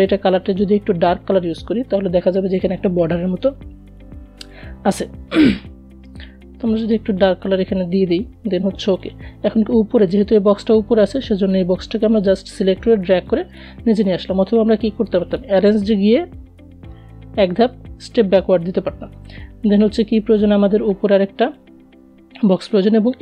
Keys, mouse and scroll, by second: 5.4-13.6 drag, 15.8 alt+scroll up 1, 19.8 click.